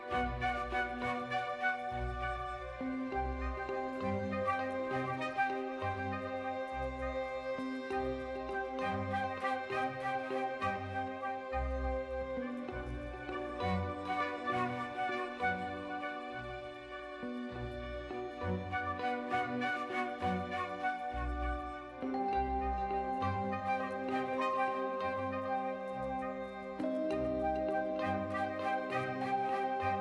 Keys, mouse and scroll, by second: 0.4 Tab, 0.7 middle drag, 1.1 shift+drag, 1.4 Tab, 1.7 2, 2.3 alt+click, 2.7 f, 3.1 click, 3.5 2, 7.4-8.8 drag, 9.2 middle click, 10.8 s, 12.3 s, 16.0 Tab, 17.3 ctrl+3, 17.9 right click, 20.5-21.0 drag, 21.0 Tab, 21.6 3, 21.8 click, 22.1 shift+click, 23.0 i, 25.4 click, 26.0 middle click, 26.5 Tab, 27.8 KP_1, 28.5 shift+middle click, 28.8 click, 29.2 Tab, 29.5 2.